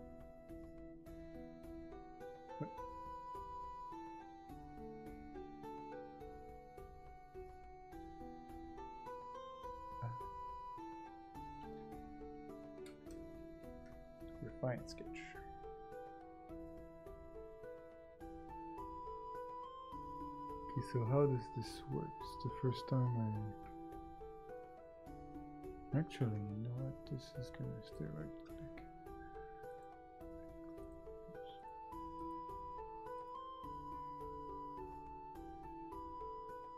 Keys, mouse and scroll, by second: 35.8 right click.